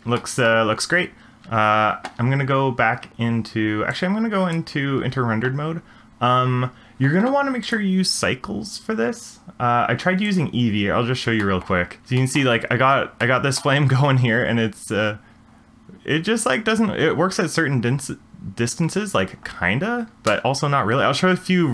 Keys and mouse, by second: 0.2-0.5 shift+middle drag, 4.1 click, 7.7 click, 11.4 shift+middle drag, 12.2 shift+middle drag, 13.2-13.7 middle drag, 18.9 space, 20.3 space.